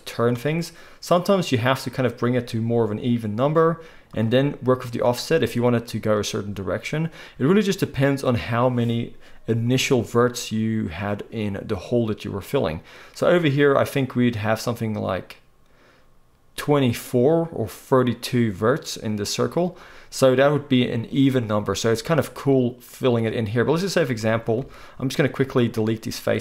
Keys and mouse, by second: 24.6 x.